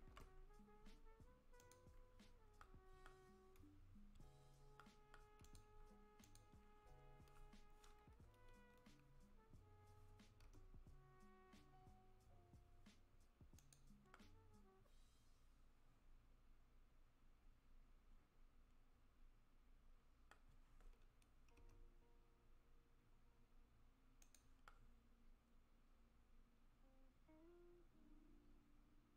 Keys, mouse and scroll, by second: 0.1 alt+p, 2.1 scroll up 4, 2.6 middle click, 3.9-4.8 scroll up 3, 4.8 middle click, 4.8 scroll up 1, 5.4 click, 6.2 click, 10.4 r, 14.1 middle click, 21.6 r, 24.7 middle click.